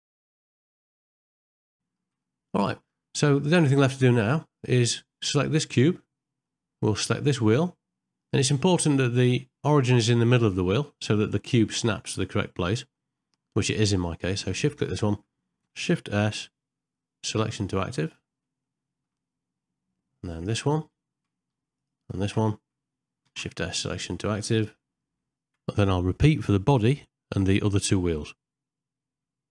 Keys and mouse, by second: 0.8 shift+click, 1.0 ctrl+p, 1.6 g, 1.8 middle click, 2.3 middle click, 2.8 middle click, 3.2 middle click, 3.7 middle click, 5.7 click, 6.5 shift+middle click, 7.1 ctrl+middle click, 11.1 ctrl+middle click, 11.6 shift+middle click, 13.1 shift+middle click, 16.2 shift+s, 18.7 middle click, 20.3 click, 23.2 shift+s, 25.6 middle click, 26.1 middle click, 28.7 shift+s.